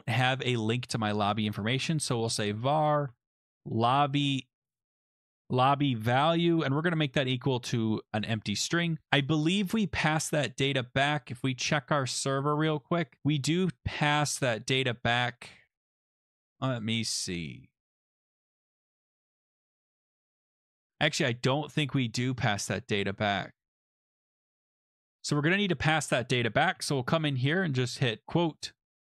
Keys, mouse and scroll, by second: 0.6 click, 1.2-7.2 typing, 8.2 click, 8.3 click, 9.3 click, 9.8 click, 9.8 =, 9.8 ", 10.2 click, 11.4 click, 11.7 click, 14.2-16.1 scroll down 17, 16.1-16.5 scroll, 16.9 scroll, 21.7 scroll, 25.7 click, 27.1 Return, 27.9-29.1 typing.